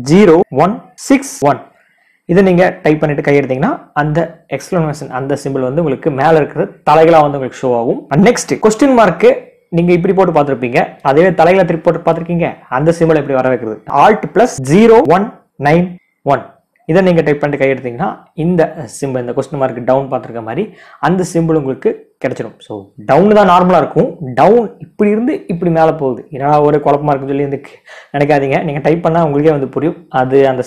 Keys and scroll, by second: 0.1 typing, 13.4-14.9 typing.